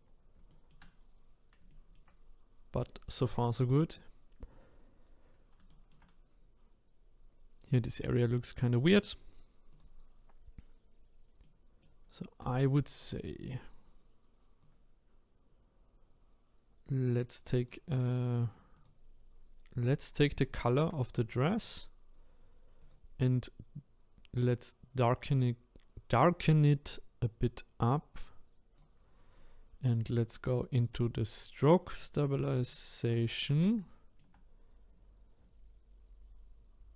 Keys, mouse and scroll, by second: 0.0-0.5 scroll down 1, 0.5 shift+middle click, 1.0-1.7 scroll down 1, 1.7-4.8 shift+middle drag, 5.1-5.7 scroll up 1, 5.7 shift+middle click, 6.2-7.1 scroll up 4, 7.1-7.6 scroll up 2, 9.7-11.4 drag, 11.4-12.4 middle drag, 12.4 click, 22.8 click, 30.7-32.7 drag, 32.7 shift+middle click, 33.2-33.6 scroll up 4, 33.6-36.7 shift+middle drag.